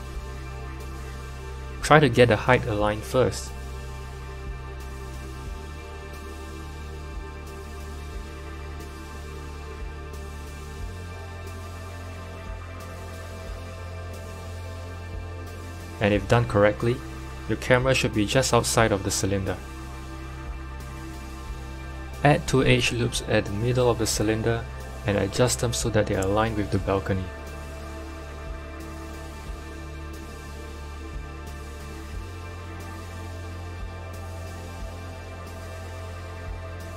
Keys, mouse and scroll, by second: 0.4 g, 5.9 click, 7.1 s, 15.9-16.5 scroll up 4, 16.5-18.7 shift+middle drag, 18.7 KP_7, 19.9-20.9 middle drag, 20.9 KP_1, 22.1 ctrl+r, 29.7 shift+middle click, 30.3 scroll up 2, 31.5-32.1 scroll down 1, 32.1 click, 32.1-32.7 scroll down 1, 33.0-33.5 scroll up 1, 33.5 scroll up 1, 33.7 g.